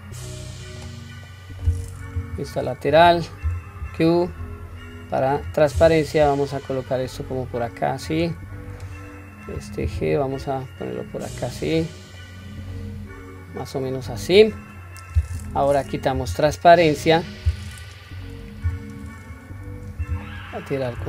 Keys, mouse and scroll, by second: 1.2 middle click, 2.2 KP_3, 3.4 q, 3.9 click, 5.8 g, 8.6-8.9 drag, 9.8 g, 12.2-14.7 middle drag, 15.0 scroll up 1, 16.2 q, 16.8 middle click, 18.7 KP_3, 19.3-20.1 scroll up 2, 20.2-20.9 shift+middle drag.